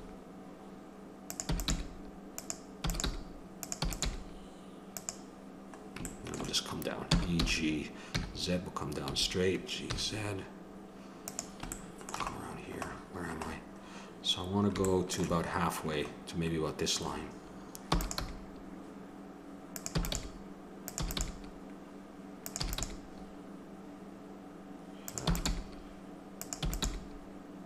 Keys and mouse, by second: 1.5 e, 1.7 g, 2.8 e, 3.1 g, 3.8 e, 4.0 g, 7.1 e, 12.6 click, 17.9 e, 18.3 g, 20.1 g, 21.0 e, 21.2 g, 22.7 e, 22.9 g, 25.3 e, 25.5 g, 26.6 e, 26.8 g.